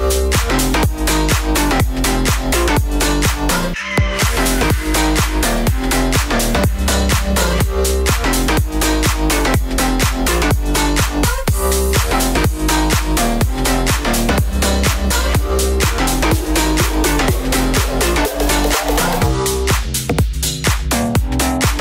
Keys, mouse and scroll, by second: 0.2 ctrl+z, 0.5 a, 1.0 click, 1.5-2.5 middle drag, 2.5 space, 2.7 Down, 3.6 g, 4.7 a, 8.9 a, 9.0 c, 9.2 click, 10.1 a, 10.2 c, 10.4 click, 11.2 a, 12.4 right click, 12.7-13.9 right drag, 14.0 right click, 14.5 click, 14.8 click, 15.0-18.4 typing, 15.4 click, 16.4 right click, 16.7 click, 17.2 right click, 18.3 right click, 19.2 middle click, 20.8 a, 20.9 c, 21.4 click.